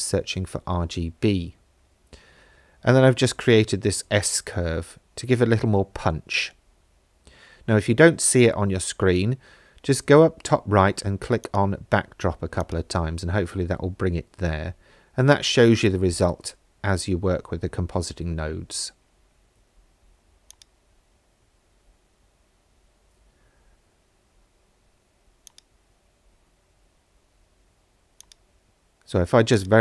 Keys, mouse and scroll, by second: 11.5 click, 12.6 click, 20.7 click, 24.0 ctrl+s, 25.5-27.5 drag, 28.2-29.8 drag.